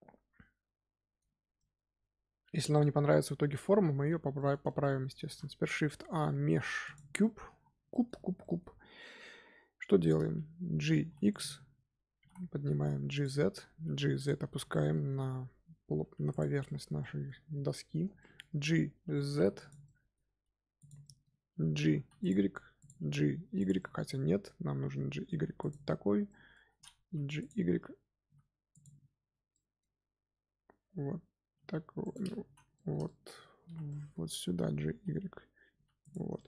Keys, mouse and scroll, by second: 1.3 scroll down 1, 1.5-5.2 middle drag, 5.2 shift+a, 7.1-7.5 middle drag, 7.5-7.8 scroll up 2, 7.8-8.2 shift+middle drag, 8.2 scroll up 1, 8.3-10.9 middle drag, 10.9 g, 12.1 g, 14.6-15.8 shift+middle drag, 15.8 Tab, 16.1 3, 16.2 click, 16.6-17.9 shift+middle drag, 17.9 scroll down 1, 18.1-19.2 shift+middle drag, 19.2 g, 19.8 middle click, 20.7 click, 21.0 middle click, 21.8 g, 22.7 click, 23.3 g, 23.7-25.1 middle drag, 25.1 g, 26.2-27.0 middle drag, 27.0 z, 27.3 click, 27.7 z, 28.2 z, 28.6 click, 29.2 z, 29.4-31.4 middle drag, 31.4 g, 32.4 z, 32.7 shift+middle click, 33.5 scroll up 1, 33.6 z, 33.8 middle click, 34.2-35.6 scroll up 2, 35.6 g, 36.3-36.4 middle drag.